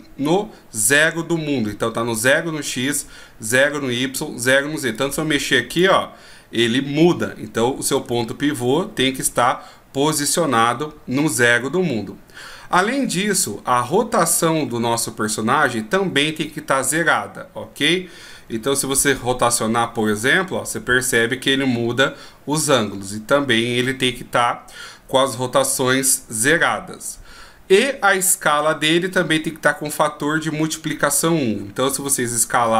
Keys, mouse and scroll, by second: 5.1 click, 8.3 ctrl+z, 18.8 r, 32.1 s.